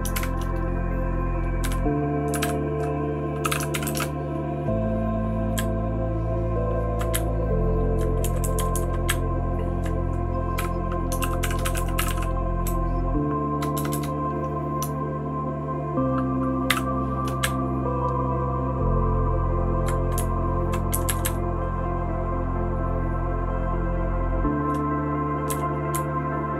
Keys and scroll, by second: 1.3-4.5 typing, 5.5 Down, 6.0-6.9 Down, 7.1 Up, 7.6 Up, 8.2 Down, 8.5 Down, 8.7 Down, 9.0 Up, 9.5 Up, 9.6 Up, 9.7 Up, 10.9-13.9 typing, 16.7-19.8 typing, 20.1 Down, 20.6 Down, 20.9 Up, 21.2-24.6 Up, 25.5 Down, 25.9 Right, 26.4-26.5 Right.